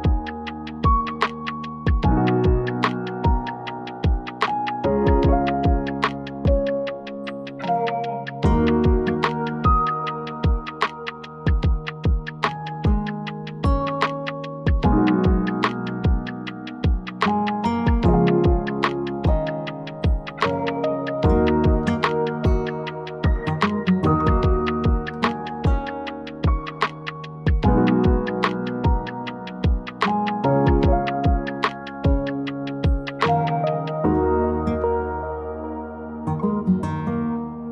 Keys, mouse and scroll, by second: 0.6 click, 2.3 click, 4.2 click, 4.6-5.5 scroll down 14, 5.5-5.8 scroll up 2, 6.7-7.1 scroll down 1, 7.3-7.6 scroll down 3, 8.3 click, 9.4 click, 10.2-13.9 drag, 15.2 o, 16.0 click, 19.0 click, 19.7-20.9 scroll, 20.9 click, 21.7 Escape, 22.1 click, 22.3 click, 22.8 click, 23.1 right click, 24.8 click, 25.4-26.0 scroll up 3, 26.4 Escape, 26.4 scroll, 27.4 click, 29.4-29.7 scroll down 2, 29.8 scroll up 1, 30.0-30.4 scroll down 1, 30.4 click, 31.2-31.5 scroll down 5, 31.7-33.1 scroll up 14, 33.1-33.6 scroll down 7, 33.6 middle click, 34.6 click, 34.8-36.0 scroll, 36.3 click, 37.1-37.4 scroll, 37.4 click.